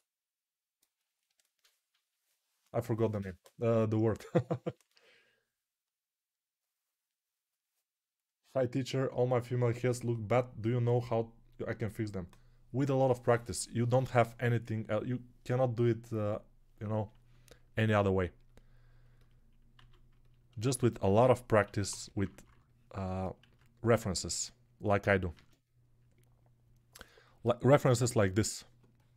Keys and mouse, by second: 0.0-19.8 middle drag, 19.8 alt+q, 21.0-22.4 typing, 23.4 ctrl+z.